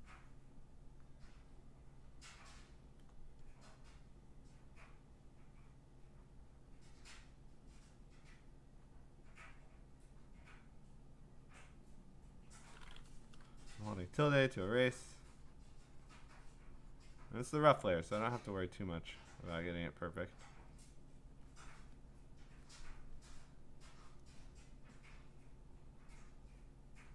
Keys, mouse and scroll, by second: 0.4 click, 1.2 click, 1.6 click, 2.0 click, 2.6 click, 4.3 click, 6.7 click, 7.7 click, 8.3 click, 10.9 click, 12.4 click, 13.6-18.8 `, 18.7 click, 18.7 `, 18.9 `, 19.5 click, 21.0 click, 21.3 click, 21.7 click, 22.6 click, 26.3 click, 26.7 click.